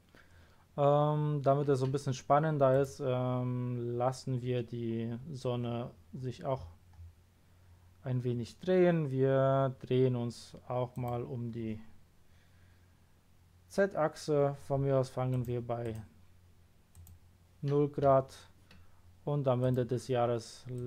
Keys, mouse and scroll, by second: 2.7 click, 5.4-6.1 scroll down 1, 6.1-7.6 scroll up 3, 7.6 scroll down 1, 10.9 click, 15.3 click, 15.8 right click, 16.9 click, 19.6 click, 20.7 click.